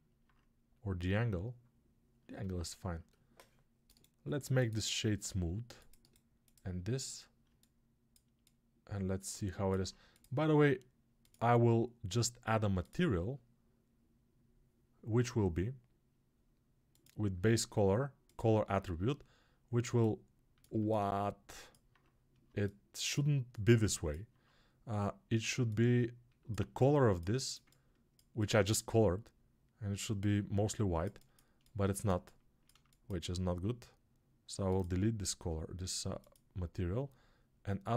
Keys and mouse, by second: 7.4-19.7 alt+right drag, 29.5 alt+click, 29.5 alt+right click, 29.7 alt+click, 29.7 alt+right click.